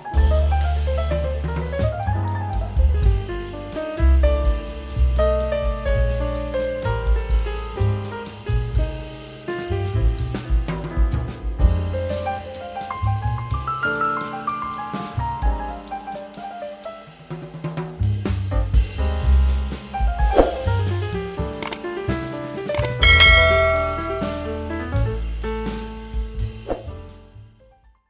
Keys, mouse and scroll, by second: 4.0 ctrl+x, 5.9 ctrl+v, 7.5 scroll down 1, 8.3 double click, 9.5 shift+F2, 9.9 F9.